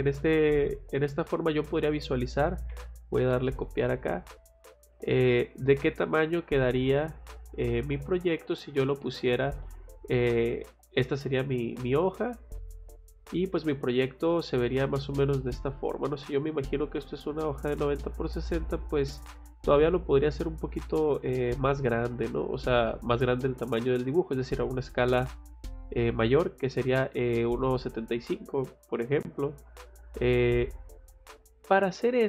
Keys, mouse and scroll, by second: 1.3 click, 1.6 click, 2.7 c, 3.2 o, 3.4 space, 3.8 click, 5.2 F8, 5.8 middle click, 7.6 scroll up 2, 8.4 click, 8.6 scroll down 2, 8.9 Escape, 10.5 middle click, 13.0 scroll up 1, 13.5 middle click, 14.0 scroll up 2, 14.3 middle click, 16.0 middle click, 18.5 scroll down 1, 29.7 middle click, 31.9 middle click.